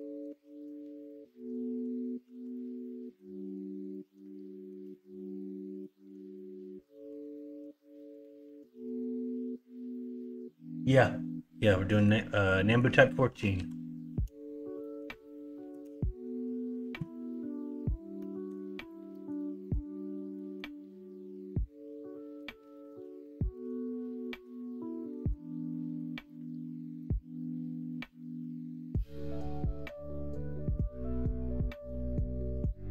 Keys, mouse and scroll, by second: 0.3 alt+z, 2.0 middle click, 2.3 ctrl+z, 2.8 middle click, 4.2 middle click, 6.3 middle click, 8.7 middle click, 11.6 middle click, 12.5 middle click, 13.3 KP_1, 13.5 KP_3, 14.8 shift+middle click.